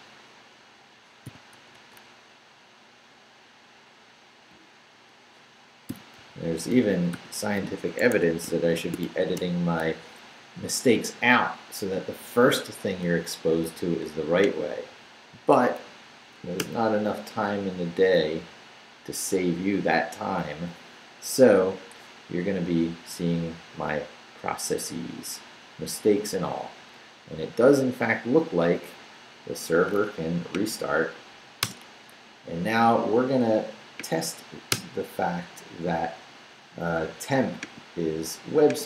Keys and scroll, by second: 1.2 i, 1.5 BackSpace, 4.9-7.6 typing, 8.0 Escape, 8.5 shift+Escape, 8.7 shift+;, 9.0 shift+w, 9.3 Return, 16.1 Up, 16.6 Return, 31.6 Return, 34.7 Return.